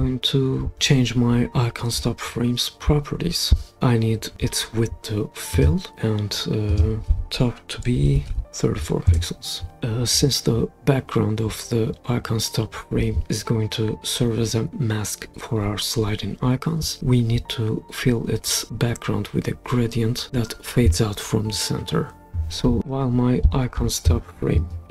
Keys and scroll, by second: 7.8-8.8 typing, 9.1 Return.